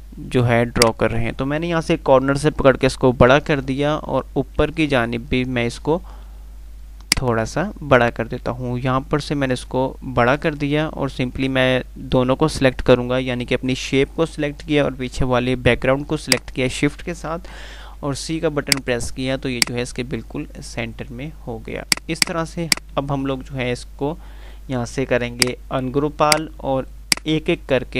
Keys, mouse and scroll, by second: 5.2 F3, 7.5-9.2 click, 9.4-10.8 click, 15.5 click, 18.1 c, 18.8 click, 19.3 F2, 21.9 click, 23.5 F3, 25.6 click.